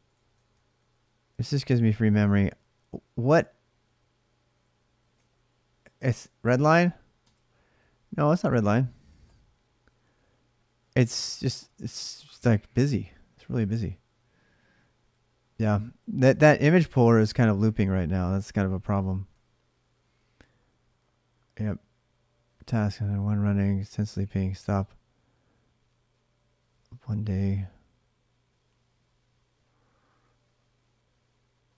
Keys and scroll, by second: 0.0-0.8 typing, 5.0 ctrl+[, 5.2 k, 7.0 Return, 8.6-9.4 typing.